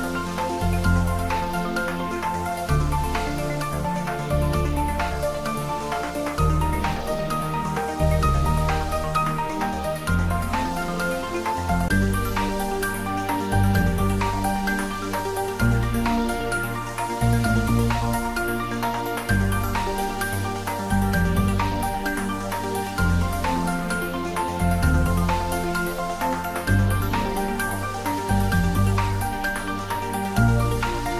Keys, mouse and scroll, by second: 0.9-1.4 scroll up 1, 1.4-2.7 scroll down 1, 2.7 s, 3.2 y, 4.8 click, 5.4 middle click, 5.9 scroll up 1, 11.0-11.5 scroll down 1, 11.5 middle click, 12.1 scroll up 1, 13.5 shift+a, 15.1 click, 22.7 g, 23.0 y, 23.9 x, 24.8 click, 25.6 s, 26.9 click, 27.1-29.1 typing, 28.4 click, 30.5 click.